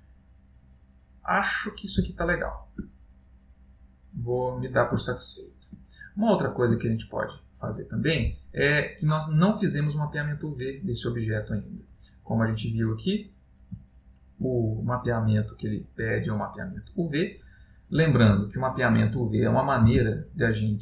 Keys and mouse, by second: 0.2 middle click, 2.3 ctrl+middle click, 3.1 middle click, 5.1 ctrl+middle click, 6.1 middle click, 7.0 middle click, 9.8 middle click, 13.2 middle click, 13.9 ctrl+middle click, 20.1 Tab.